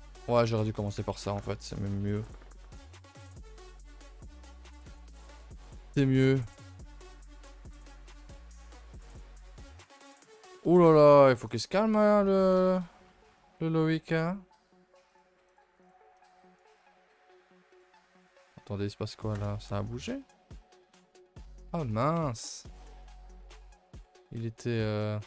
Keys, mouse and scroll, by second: 0.6 a, 0.7 a, 0.8 scroll down 2, 1.1 ctrl+s, 1.4-1.8 shift+middle drag, 1.8-2.1 scroll down 1, 6.9-7.2 scroll down 3, 7.4 KP_0, 8.7 KP_0, 9.6 middle drag, 10.1 scroll down 2, 10.4 a, 10.6 a, 10.7 scroll up 1, 11.0 ctrl+s, 11.4 click, 11.8-12.2 shift+middle drag, 12.2 a, 12.4 a, 12.6 KP_0, 13.1 KP_0, 13.9 shift+middle drag, 14.0 scroll up 1, 18.1-19.3 scroll down 8, 18.3 middle click, 19.3 KP_0, 20.0-20.3 scroll down 5, 20.3 shift+middle click, 20.5-21.4 scroll up 5, 20.9 shift+middle drag, 21.4 click, 21.7 shift+middle drag, 21.8 scroll up 2, 23.3 click, 24.6 click.